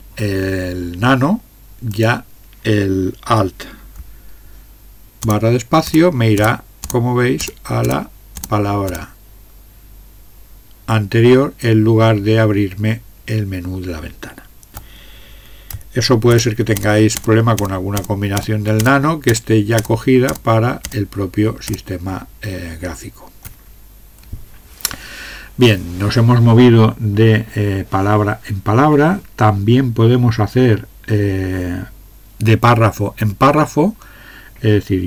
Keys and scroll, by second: 5.2 alt+space, 5.8 alt+space, 6.4 alt+space, 6.8 alt+space, 7.4 alt+space, 7.8 alt+space, 8.4 alt+space, 8.9 alt+space, 16.3 ctrl+space, 16.8 ctrl+space, 17.2 ctrl+space, 17.6 ctrl+space, 18.0 ctrl+space, 18.4 ctrl+space, 18.8 ctrl+space, 19.3 ctrl+space, 19.8 ctrl+space, 20.3 ctrl+space, 20.8 ctrl+space, 21.6 ctrl+space.